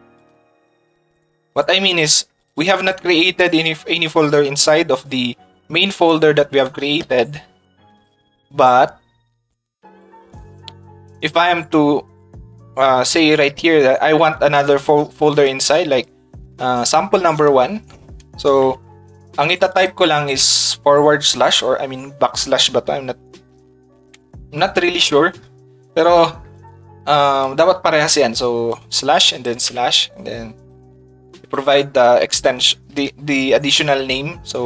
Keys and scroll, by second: 32.6 shift+s.